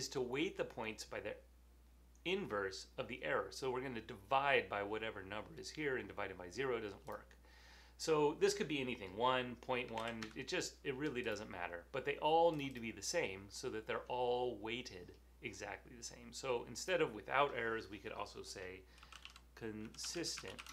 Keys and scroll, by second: 9.7-10.4 typing, 12.5-13.3 typing, 18.9-20.7 typing.